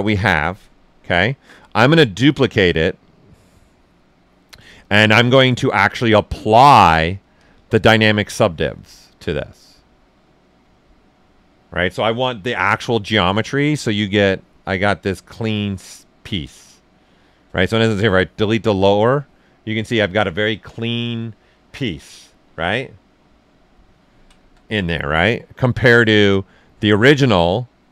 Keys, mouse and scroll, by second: 2.0-6.6 drag, 12.5 shift+f, 14.0 click, 14.7 shift+f, 18.0 click, 18.6 right click, 19.1-23.4 ctrl+right drag, 22.2 f, 23.7 ctrl+right click, 24.6 shift+right click, 25.6-27.9 drag.